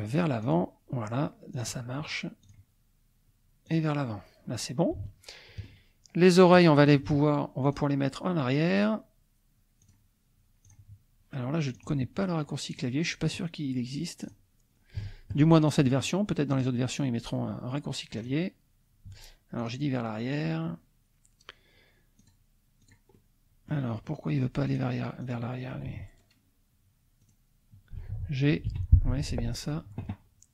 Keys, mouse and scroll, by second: 0.6 click, 1.5 click, 2.4 click, 3.7 click, 5.1 shift+middle click, 6.7 click, 7.6 click, 9.8 click, 10.8 click, 11.9 click, 12.7 click, 14.2 click, 14.7 shift+middle click, 15.0 shift+click, 15.5 shift+middle click, 15.6 shift+click, 16.5 click, 18.2 click, 19.6 click, 22.2 click, 22.9 click, 23.2 click, 23.9-24.2 scroll up 1, 24.7 click, 25.2 click, 27.3 click, 28.7 g, 29.1 Escape.